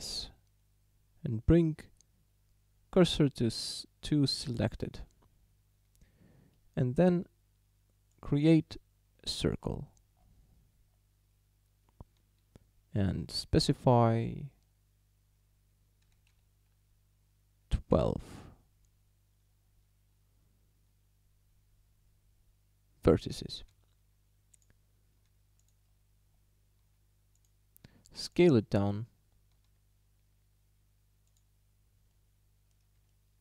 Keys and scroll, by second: 16.1 1, 16.3 2, 18.0 Return, 23.6 s, 25.2 s, 29.6 s.